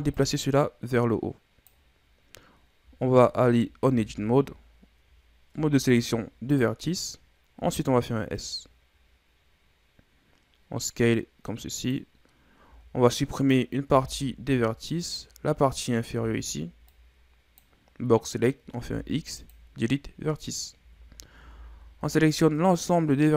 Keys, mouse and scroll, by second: 0.2-2.0 drag, 2.0-2.6 scroll up 6, 2.6-3.0 scroll down 2, 3.0-3.9 scroll up 5, 3.9 Tab, 5.6 ctrl+Tab, 7.6 s, 12.7 z, 13.4 right click, 13.9 b, 15.8 right click, 16.2 b, 18.7 x, 20.8 z, 21.4 a, 21.7 a, 22.0 a, 22.9-23.3 drag.